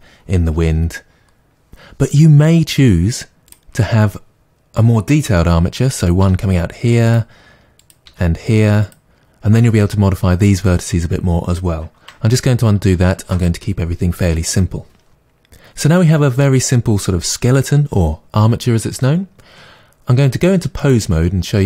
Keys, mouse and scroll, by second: 3.4 click, 6.2 e, 7.1 click, 7.8 click, 8.0 e, 12.3 ctrl+z, 20.8-21.6 drag.